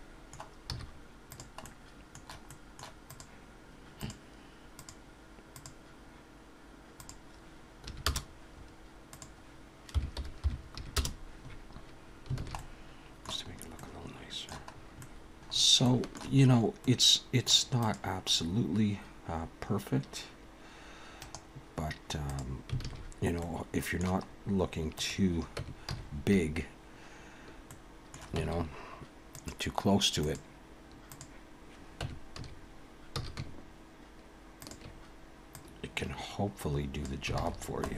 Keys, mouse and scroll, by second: 0.7 z, 1.6 middle click, 2.5 middle click, 3.0 click, 4.0 click, 4.8 click, 7.0 click, 9.1 click, 12.1-12.4 scroll down 3, 12.4 alt+a, 12.6 middle click, 13.5-14.5 scroll up 3, 13.8 middle click, 14.7-15.2 scroll up 2, 15.0 middle click, 15.5 scroll up 2, 15.8 shift+middle click, 16.4-16.8 scroll up 2, 16.8 middle click, 17.7 click, 18.4-18.8 scroll up 2, 19.3 scroll down 1, 21.1 right click, 22.8 alt+a, 23.0-23.3 scroll down 4, 23.3 middle click, 24.3-24.6 scroll up 2, 24.9 click, 25.6 Tab, 25.9 a, 27.6 middle click, 28.4 Tab, 29.3 click, 32.0 Tab, 32.3 a, 33.1 s, 35.6 click, 37.4 alt+a, 37.5-37.9 scroll down 3, 37.8 middle click.